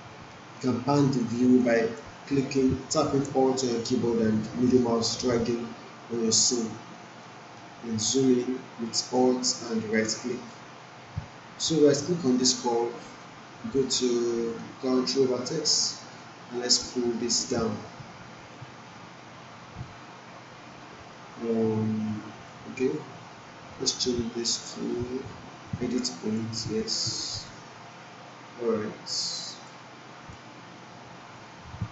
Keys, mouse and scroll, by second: 1.1-1.7 alt+middle drag, 7.6-9.7 alt+right drag, 10.3 alt+middle click, 12.0-14.8 right drag, 16.1-17.0 drag, 23.6-24.6 right drag, 25.6-26.5 drag.